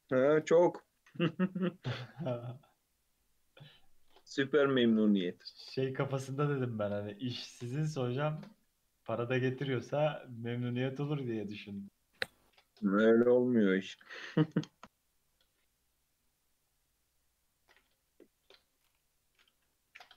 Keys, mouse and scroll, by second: 0.5-1.6 shift+middle drag, 1.6-2.2 scroll up 3, 2.2 shift+middle click, 2.7-3.1 scroll up 2, 4.0 ctrl+r, 5.5 shift+middle click, 6.4 1, 7.2 alt+z, 7.6 click, 8.0 g, 9.6 shift+middle click, 10.0 click, 10.4 g, 11.9 click, 12.5 click, 12.8 g, 14.8 Tab, 15.1 Tab, 15.3 alt+z, 15.4 alt+scroll down 2, 15.6 middle click, 16.0-16.6 scroll down 5, 16.7-19.2 middle drag, 19.2 KP_3, 19.7 Tab, 20.0 Tab.